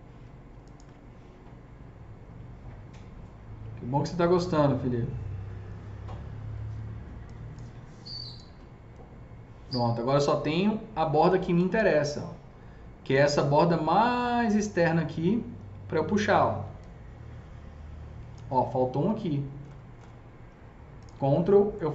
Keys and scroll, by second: 18.9 ctrl+shift+z.